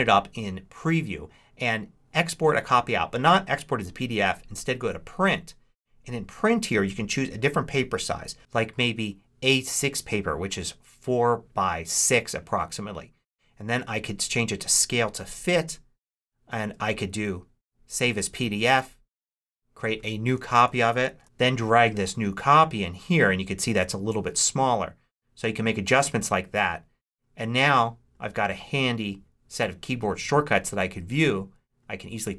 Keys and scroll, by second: 20.5 Right, 20.7-21.6 typing.